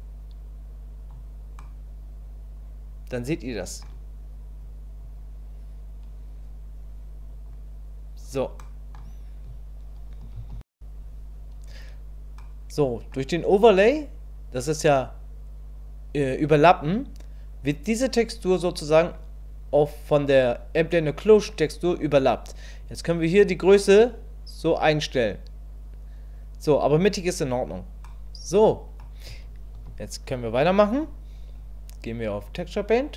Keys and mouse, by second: 1.6-3.8 middle drag, 5.0-7.4 drag, 8.6 middle click, 12.4 middle click, 22.9-27.1 drag, 28.0 middle click, 29.8 KP_1, 32.4 click.